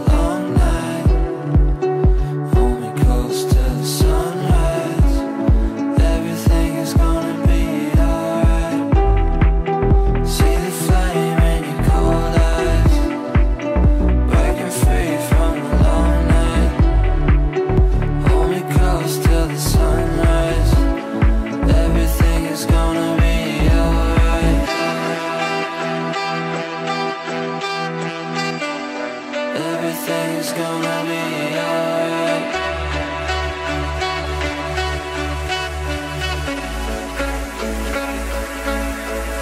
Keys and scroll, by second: 13.8 Delete.